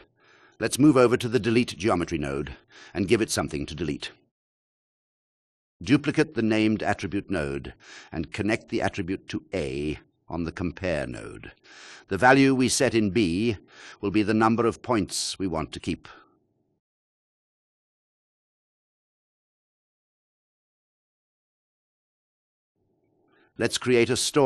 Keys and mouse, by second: 8.5 shift+d, 11.5-13.3 drag, 15.0 click, 15.8 click, 17.6 click, 19.3 click.